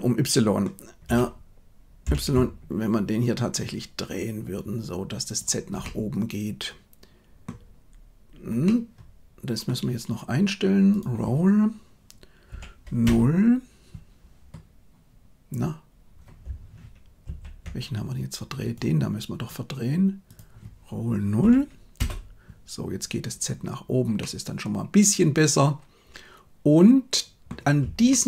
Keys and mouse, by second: 1.1 r, 5.9-7.5 middle drag, 8.7-9.7 middle drag, 10.9-13.1 drag, 17.3 ctrl+z, 20.3-22.0 drag, 24.1-27.4 middle drag, 28.1-28.2 shift+middle drag.